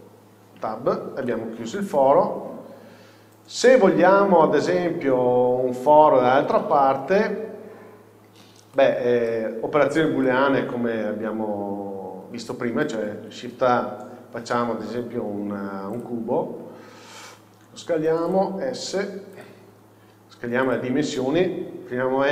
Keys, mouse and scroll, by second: 0.0 scroll down 1, 0.7 Tab, 1.3-5.5 middle drag, 8.8 shift+middle click, 10.0-10.3 scroll down 1, 10.6-17.3 middle drag, 16.1 shift+a, 17.1 scroll down 1, 17.8 s, 18.4 click, 18.8 s, 19.7 scroll up 1, 20.2 s, 20.8 click, 21.9 n.